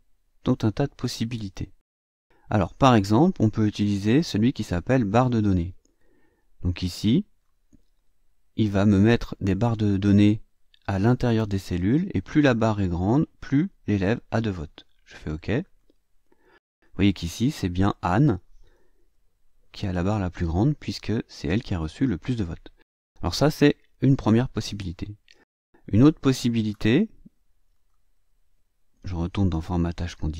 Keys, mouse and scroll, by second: 5.0 click, 6.6-7.6 drag, 15.6 click, 16.6 click, 19.2-20.2 ctrl+scroll up 2, 20.7 scroll down 2, 24.9 click, 25.8-26.8 drag, 27.7 click.